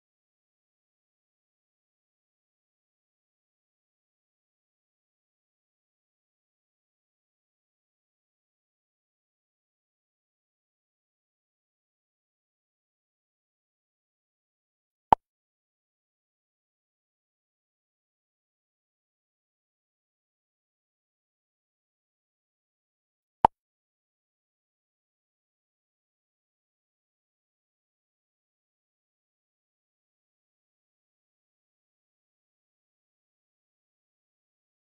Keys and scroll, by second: 0.6 space, 1.2 space, 2.6 space, 5.7 space, 8.2 space, 14.6 space.